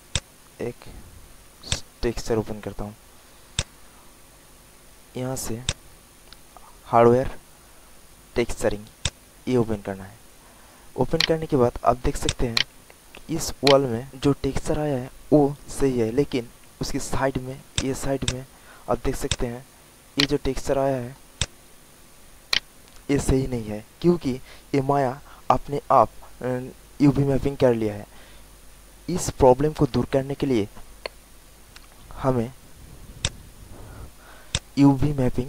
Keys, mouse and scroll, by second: 5.6 click, 9.8 alt+click, 10.4 alt+middle click, 10.8 alt+click, 11.2 alt+right click, 11.8 alt+middle click, 12.2 alt+click, 12.5 alt+right click, 13.2 alt+middle click, 13.6 alt+right click, 17.4 alt+middle click, 17.7 alt+click, 18.2 alt+click, 18.4 alt+middle click, 18.5 alt+middle click, 18.8 alt+right click, 19.2 alt+click, 19.5 alt+click, 19.7 alt+middle click, 20.1 alt+right click, 20.9 alt+middle click, 21.3 alt+click, 21.9 alt+middle click, 22.5 alt+right click, 33.1 click.